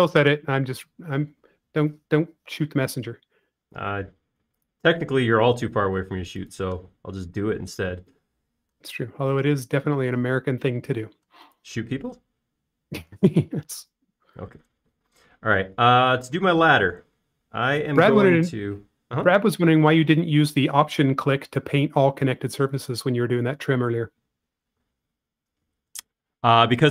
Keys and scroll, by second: 3.9 m, 8.6 space, 12.1 space, 16.6 r, 22.3 Right, 24.7 m, 26.0 space.